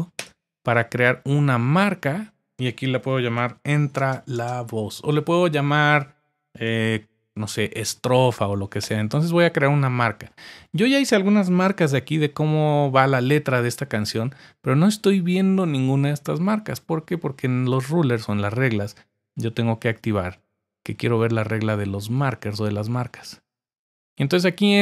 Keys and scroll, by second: 0.2 Return, 3.0-5.3 typing, 8.8 Return, 11.8 super+z.